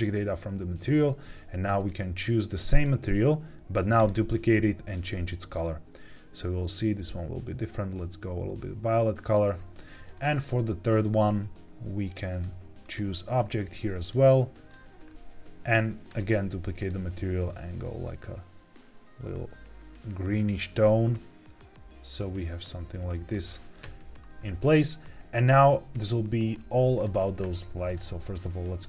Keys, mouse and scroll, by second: 1.7-3.1 drag, 3.9 click, 4.8 click, 10.0 click, 10.2 click, 12.2-13.0 drag, 13.9 click, 16.0 click, 16.7 click, 24.1 scroll down 2, 26.8 click, 27.8 click.